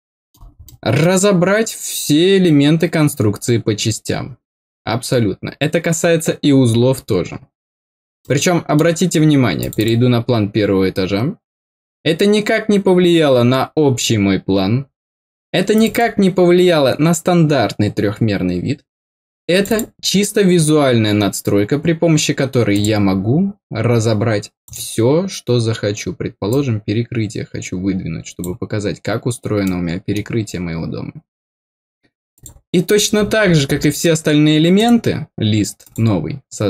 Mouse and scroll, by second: 0.6 middle click, 8.2 middle click, 9.5 click, 9.7 click, 15.7 click, 15.9 click, 19.5 click, 19.6 click, 22.7 click, 24.6 click, 26.4-28.4 drag, 29.6 middle click, 32.3 click, 32.9-33.8 scroll down 8, 34.7 right click, 35.8 click.